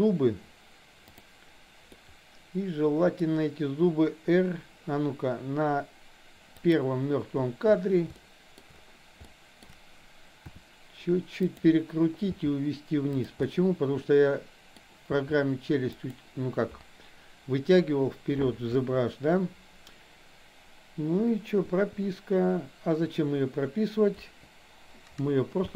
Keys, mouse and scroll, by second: 1.9-3.3 middle drag, 6.6 click, 8.1-8.6 shift+middle drag, 9.3-9.6 shift+middle drag, 10.4 r, 12.3 g, 13.4-14.9 middle drag, 15.1 g, 18.8 KP_1, 21.6 i, 24.1 Delete, 25.6 space.